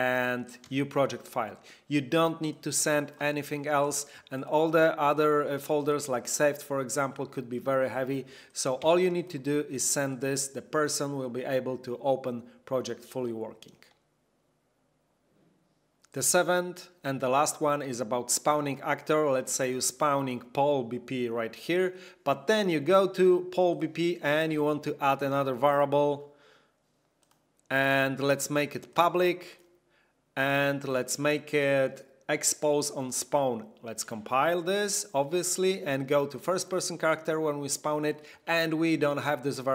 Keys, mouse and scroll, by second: 3.5 click, 4.3 click, 8.4 click, 9.1 ctrl+click, 10.1 ctrl+click, 18.5 click, 19.7 click, 23.7 click, 27.2 click, 28.8 click, 33.0 click, 36.5 click.